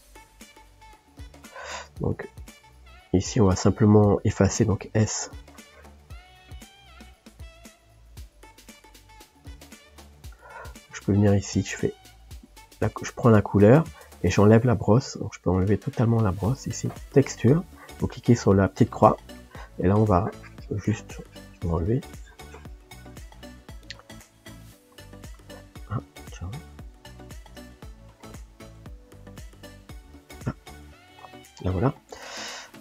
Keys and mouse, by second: 0.0 click, 0.6-6.0 middle drag, 6.0-8.3 drag, 8.3-12.5 ctrl+middle drag, 12.5 s, 19.8-23.3 drag, 24.5-25.6 middle drag, 29.5-32.8 drag.